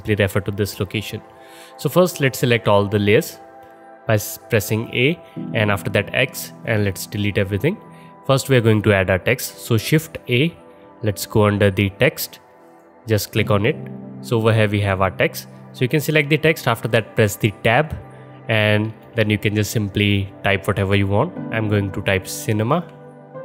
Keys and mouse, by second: 4.9 a, 6.0 x, 9.9 shift+a, 13.8-14.4 alt+middle drag, 17.6 Tab, 18.6-19.5 typing, 22.7 shift+c.